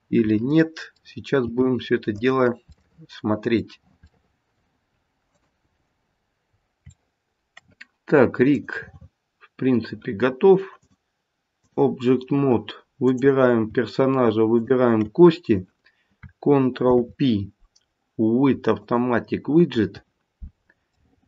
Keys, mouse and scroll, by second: 0.3 middle click, 0.7 middle click, 1.4 g, 2.7 middle click, 3.1 middle click, 4.1 middle click, 5.2 click, 5.7 g, 6.7 middle click, 8.5 click, 10.8 click, 13.0 click, 14.5 shift+click, 15.2 shift+click, 16.7 ctrl+p, 20.9 middle click.